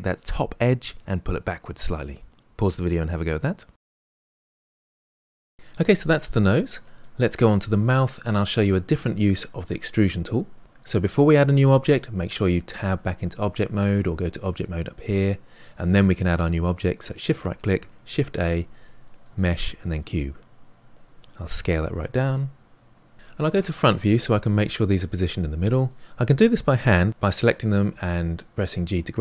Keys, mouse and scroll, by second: 12.7 Tab, 15.1-17.0 middle drag, 17.0 shift+right click, 18.1 shift+a, 21.4 s, 23.4 KP_1, 25.8 click, 26.7 g, 28.3 click, 28.4 g.